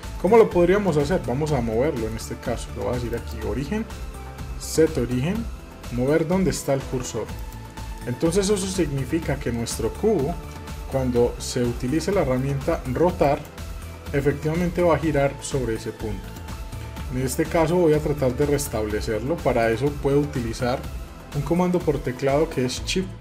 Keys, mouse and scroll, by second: 1.5 scroll down 1, 1.7-3.1 shift+middle drag, 3.1-8.0 drag, 8.0-8.9 middle drag, 9.5-10.3 middle drag, 10.3 shift+z, 12.0-13.2 shift+middle drag, 13.2 click, 14.6-17.0 drag, 17.0 ctrl+z, 18.0-21.0 middle drag.